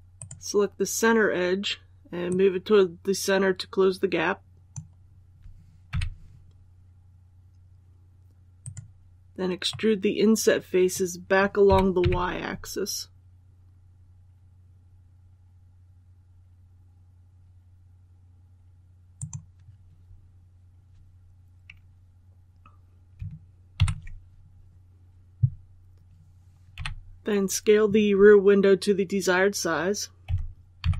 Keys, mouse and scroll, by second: 0.0 right click, 2.2-5.5 drag, 5.8 3, 8.5-9.5 right drag, 9.6-11.5 middle drag, 11.5-11.9 typing, 19.0 click, 23.6 KP_1, 26.6 l, 30.1-30.7 typing.